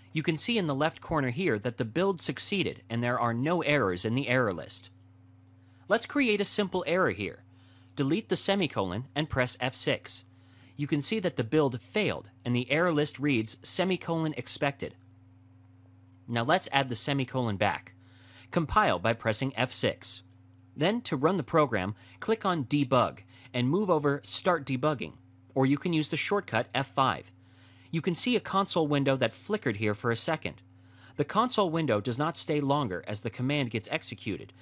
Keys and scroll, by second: 8.4 F6, 19.4 F6, 25.2 F5.